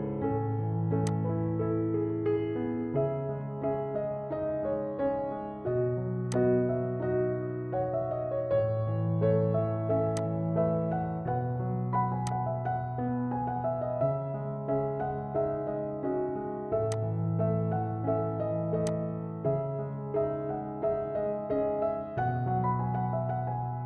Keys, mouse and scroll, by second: 0.1 scroll up 1, 1.1-4.5 drag, 4.5-5.0 scroll down 1, 6.4-9.9 drag, 10.2-14.9 drag, 14.9-16.8 scroll down 2, 17.3 click, 20.3 F4.